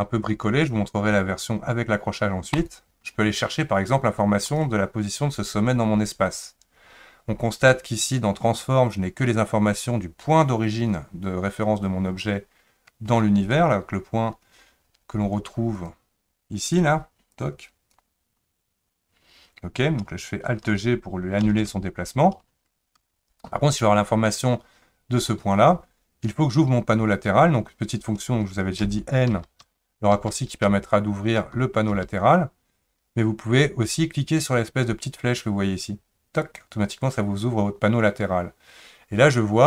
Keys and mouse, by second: 2.5 click, 4.5 click, 13.1 Tab, 15.7 click, 17.4 click, 21.4 alt+g, 23.0 Tab, 28.8-32.8 typing, 36.4 click.